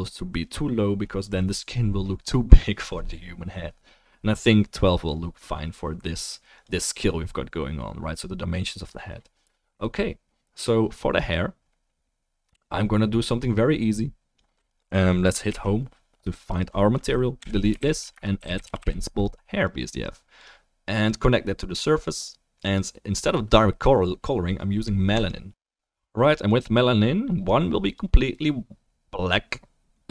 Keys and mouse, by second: 6.6-13.4 drag, 14.7-19.7 drag, 15.4 Home, 16.5 middle click, 16.5 right click, 17.4 Delete, 17.5 Delete, 17.8 shift+a, 21.0-25.5 drag, 27.4 click.